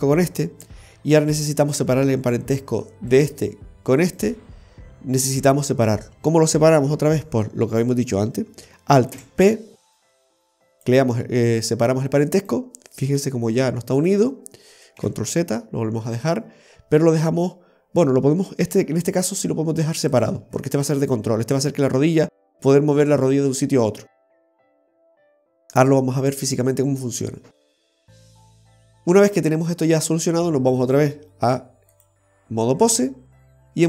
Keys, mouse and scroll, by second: 0.3 right click, 3.2 right click, 4.1 right click, 5.3 right click, 9.2 alt+p, 12.4 right click, 13.3 g, 15.1 ctrl+z, 18.8 g, 31.0 click.